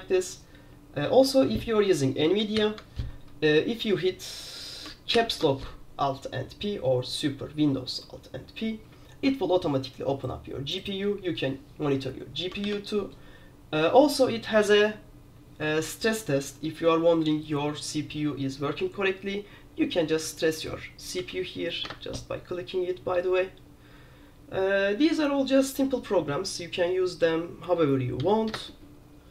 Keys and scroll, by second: 2.7 alt+p, 5.3 alt+super+p, 12.8 super+q, 21.3 j, 22.0 Return, 28.3 k, 28.6 Return.